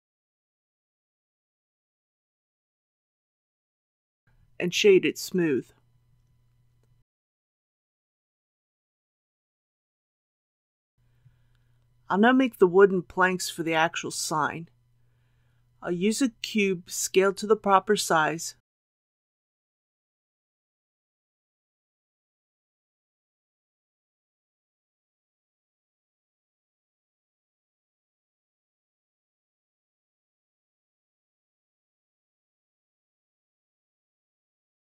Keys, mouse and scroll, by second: 3.7 ctrl+a, 6.8 right click, 7.8 click, 11.2 alt+a, 11.9 scroll down 1, 15.8 shift+a, 18.3 click, 19.8 typing, 22.8 click, 23.6-24.3 typing, 28.8 typing, 32.6 click, 33.2-34.4 typing.